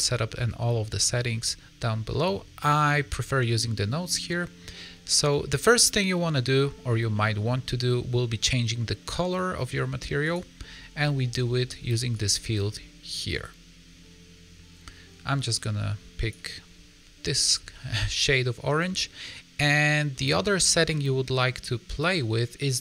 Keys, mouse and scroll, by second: 0.6-2.2 scroll up 25, 2.2 scroll up 7, 2.7 middle click, 4.2 middle click, 4.8-5.2 scroll up 1, 5.2 middle click, 7.1 middle click, 7.4-9.1 scroll up 3, 10.2 click, 17.6 middle click, 19.5 middle click.